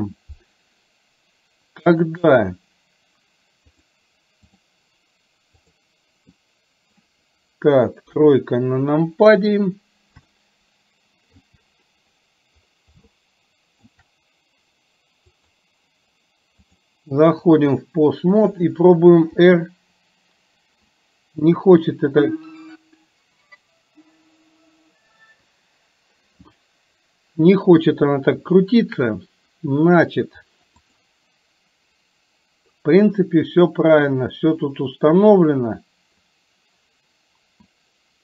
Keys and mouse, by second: 2.0 click, 4.0 click, 8.1 KP_3, 10.5 shift+middle click, 13.2 shift+middle click, 15.5 click, 16.7 click, 18.3 click, 19.5 r, 31.0 click.